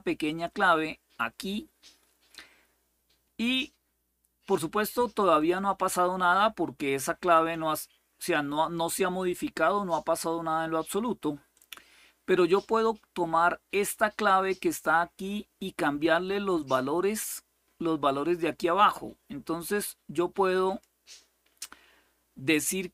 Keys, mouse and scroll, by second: 0.0 click, 5.1 click, 7.0 click, 11.4 click, 14.2 click, 16.3 click, 19.4-20.5 drag.